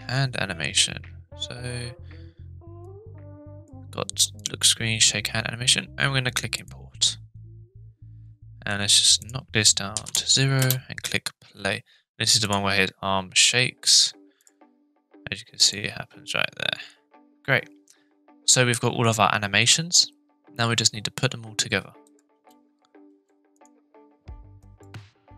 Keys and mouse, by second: 9.2-10.5 drag, 10.6 space, 12.4 click, 14.4 click, 15.6 click, 22.1 click, 22.3 space, 23.1 space, 23.5 click, 24.6 drag.